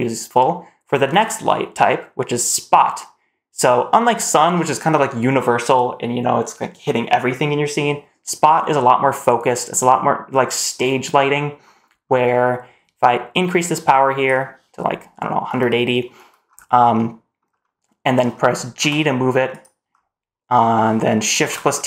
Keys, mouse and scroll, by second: 3.8-7.9 scroll down 2, 9.0 click, 11.5-12.1 scroll down 1, 12.1 scroll up 3, 13.2 click, 16.3-16.8 scroll down 1, 16.8-17.2 middle drag, 17.4 scroll down 1, 17.8 scroll up 1, 17.9 middle drag, 18.1-18.6 scroll down 2, 18.6 g, 19.7-20.6 scroll up 1, 20.6 middle click, 20.6 scroll up 1, 21.2 shift+t.